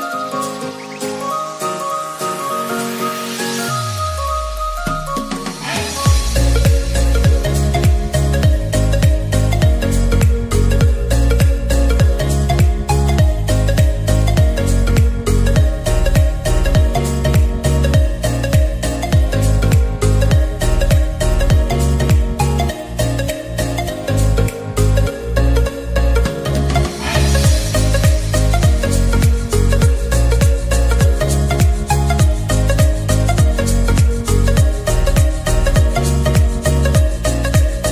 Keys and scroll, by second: 22.4 ctrl+z.